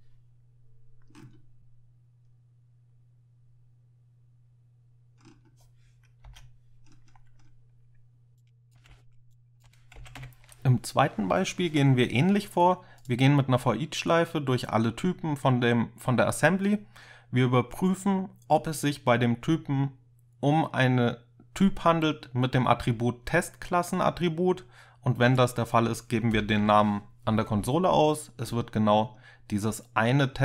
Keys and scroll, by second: 6.3 Escape, 8.9 ctrl+k, 8.9 ctrl+c, 10.0 ctrl+k, 10.2 ctrl+u, 26.4 ctrl+F5.